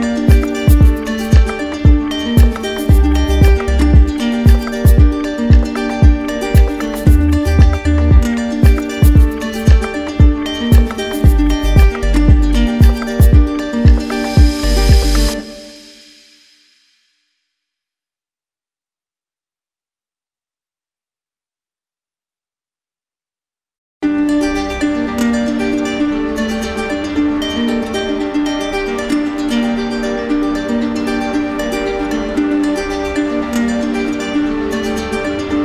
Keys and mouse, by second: 1.9 click, 3.2 click, 4.9-6.2 alt+right drag, 7.5 z, 8.4 z, 9.1 click, 9.8 right click, 11.3 click, 12.2 right click, 13.9 right click, 16.5 click, 17.4 ctrl+z, 18.1 z, 19.6-20.6 drag, 22.2-23.3 drag, 23.3 shift+right click, 25.6 right click, 28.6 right click, 28.9 ctrl+z, 31.7 click, 32.7 click, 32.9-33.9 right drag, 35.1 click.